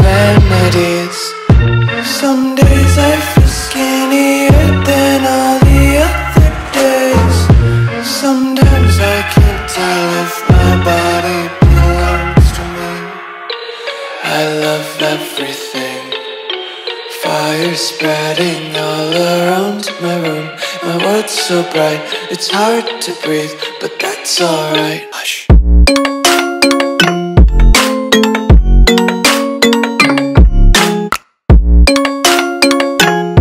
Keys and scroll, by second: 3.9-5.9 typing, 4.4 alt+super+space, 4.5 alt+super+space, 6.4 alt+super+space, 6.5 alt+super+space, 7.4 alt+super+space, 7.5 alt+super+space, 7.8 alt+super+space, 7.8 alt+super+space, 9.4-10.2 typing, 12.7 space, 13.2 super+space, 13.3 super+space, 13.4-14.0 super+space, 14.4 super+space, 14.5 super+space, 14.5 super+space, 14.9 super+space, 15.8-17.4 typing, 20.8 space, 21.3 super+space, 21.4 super+space, 21.6 super+space, 22.5 space, 23.0 alt+super+space, 23.1 alt+super+space, 23.3 alt+super+space, 23.3 alt+super+space, 23.4 alt+super+space, 23.5 alt+super+space, 23.7 alt+super+space, 27.8 i, 29.6 v, 31.0 shift+super+[, 32.2 a.